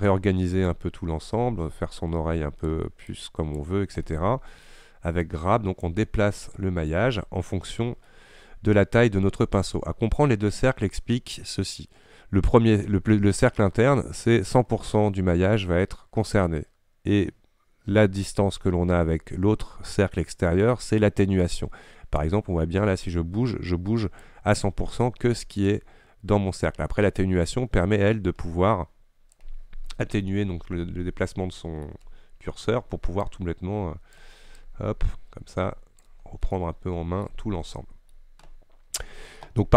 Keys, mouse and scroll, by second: 0.3-1.3 middle drag, 1.3-4.1 drag, 4.1 scroll down 1, 4.1-5.3 middle drag, 5.3-6.7 drag, 6.7 middle click, 7.1-7.5 scroll down 2, 7.5 middle click, 8.2-8.8 scroll up 1, 8.8-9.3 scroll down 2, 22.3-28.8 drag, 30.4-32.0 middle drag, 32.0-32.5 scroll up 1, 33.3-36.3 drag, 36.3-36.6 scroll down 1, 36.6 middle click, 37.5 scroll up 1, 37.9 middle click, 38.5-39.1 scroll up 2.